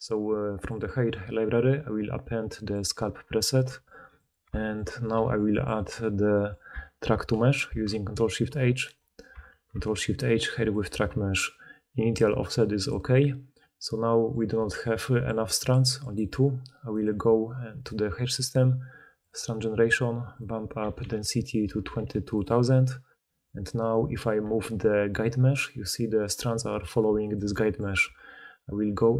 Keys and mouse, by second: 3.6 g, 4.2-9.0 shift+middle drag, 5.1 g, 7.4 ctrl+shift+h, 9.0-9.8 ctrl+shift+drag, 9.4 ctrl+shift+h, 9.8-15.2 middle drag, 15.0-15.8 d, 15.2-19.2 drag, 16.1 d, 16.2 d, 16.2-17.8 middle drag, 16.2-17.8 right drag, 16.9 d, 19.2-20.4 middle drag, 20.4-22.4 drag, 20.9 2, 21.8 2, 22.4-23.7 middle drag, 23.7 click, 23.8-24.8 middle drag, 24.4 g, 24.8 click, 25.2 middle click, 25.8-28.0 drag, 28.0 Tab, 28.5-29.1 middle drag.